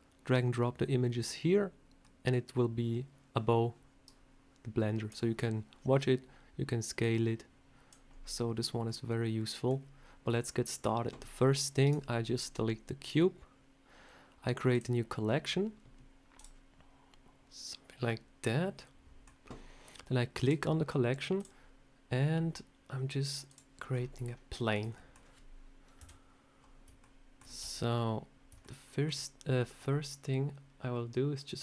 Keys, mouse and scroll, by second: 8.8 middle click, 10.3 shift+middle click, 11.7 right click, 12.9 right click, 16.3 click, 18.7 middle click, 20.3 click, 21.3 click, 23.8 scroll up 5, 24.1 shift+middle click, 24.8 middle click, 25.9 KP_7, 26.9 shift+middle click, 27.3 scroll down 1, 27.5 Tab, 27.7 scroll up 2, 28.5 shift+middle click.